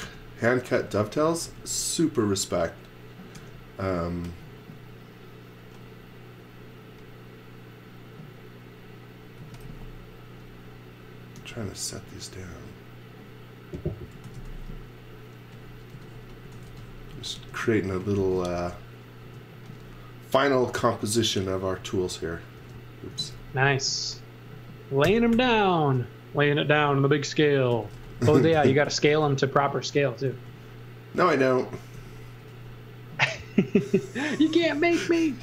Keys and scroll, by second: 0.0-1.9 typing, 3.3 r, 9.1-10.1 typing, 11.3 r, 13.8-14.8 typing, 15.9-19.2 typing, 20.2 space, 20.5 m, 22.5-23.8 typing, 25.0 g, 25.3 m, 27.4-30.3 typing, 32.0 m.